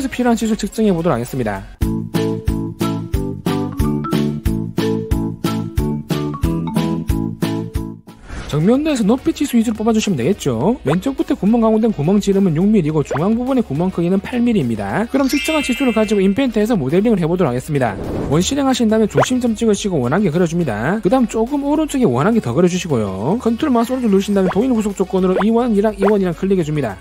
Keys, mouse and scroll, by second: 1.9 click, 2.1 click, 2.3 click, 2.5 right click, 2.6 click, 2.7 click, 3.0 click, 3.4 right click, 3.7 click, 3.9 click, 4.2 click, 4.8 right click, 4.9 click, 5.2 click, 5.5 click, 6.0 right click, 6.2 click, 6.4 click, 6.6 click, 6.8 right click, 7.0 click, 7.3 click, 19.1 2, 20.2 click, 21.0 click, 22.5 click, 23.3 click, 24.4 ctrl+right click, 25.1 right click, 25.8 right click, 26.8 right click.